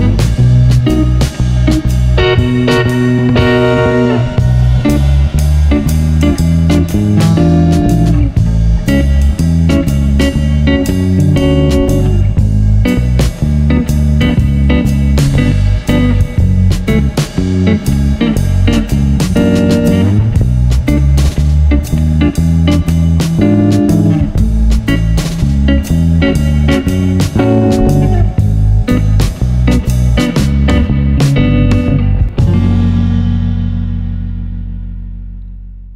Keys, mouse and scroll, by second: 3.8 ctrl+z, 6.2-7.3 drag, 7.4-7.7 drag, 7.7 middle click, 8.1 n, 9.8 drag, 11.2-13.4 middle drag, 13.4-14.6 drag, 15.6-16.3 middle drag, 16.5 right drag, 16.8 r, 20.0 ctrl+l, 20.9 r, 22.4 r, 23.4-25.0 drag, 25.0 middle click, 25.2 middle click, 25.7 click, 26.1 middle click, 26.4 r, 26.6 middle drag, 27.0 middle drag, 27.4 middle drag, 28.1 right click, 28.2 g, 29.8 click, 30.0 r, 30.0 click, 30.6 r, 33.9 click, 34.6 right click, 34.7 g.